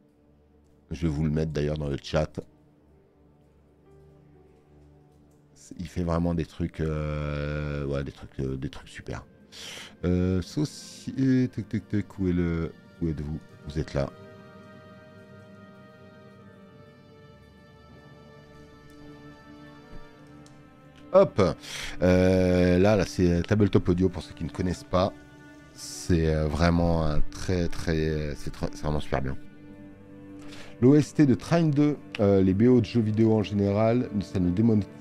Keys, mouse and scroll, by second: 1.5 click.